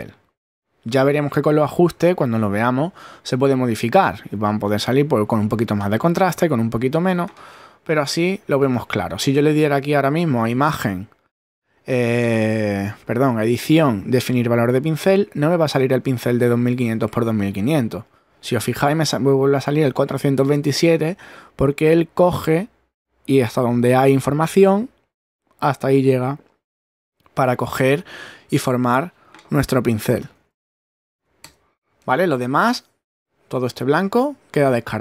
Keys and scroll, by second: 7.6 super+-, 29.9-30.8 typing, 31.4 Return.